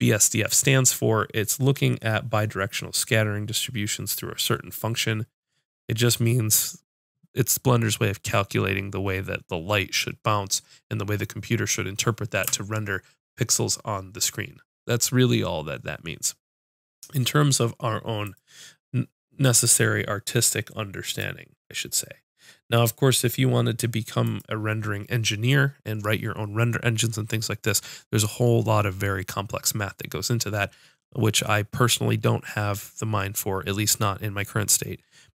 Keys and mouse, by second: 12.4 KP_Subtract.